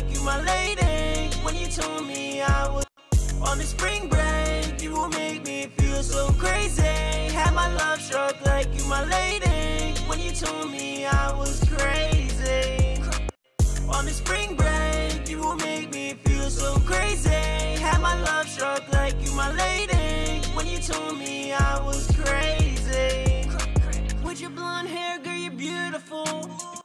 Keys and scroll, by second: 18.8-19.9 typing.